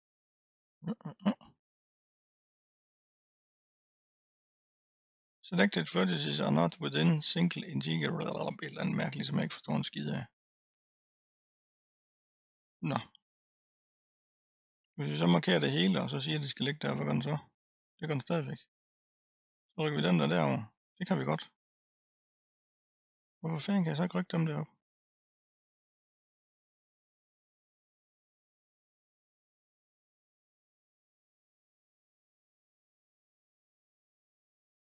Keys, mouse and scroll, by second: 3.5-6.5 drag, 11.7-12.5 scroll up 2, 12.5-13.2 scroll down 2, 14.8 click, 16.9-17.9 drag, 18.4 drag, 20.1-23.1 drag, 23.8-24.2 scroll up 5, 25.7-26.2 scroll down 1, 26.2 click, 28.3 l, 29.1 l, 29.8 l, 30.4 middle click, 31.1-32.6 scroll up 3, 32.6 l, 33.5-34.3 scroll down 1.